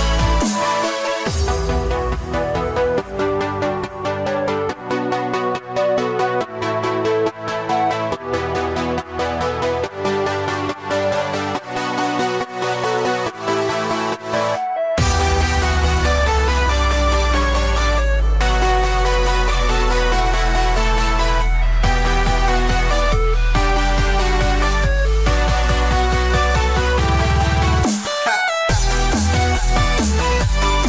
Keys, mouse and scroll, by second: 2.9 click, 5.4 s, 9.0 click, 11.1 click, 11.1 s, 13.4 click, 14.1 click, 16.0 click, 18.3 click, 19.7 click, 19.8 click, 21.9 click, 24.9 click, 26.7 shift+click.